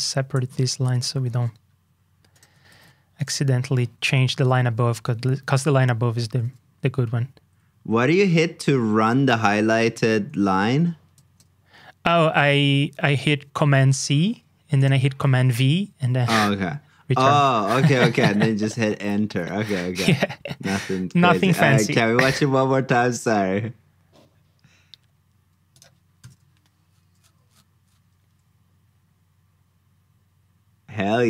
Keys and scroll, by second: 2.7 super+c, 4.3 super+v, 13.8 super+c, 15.1 super+v.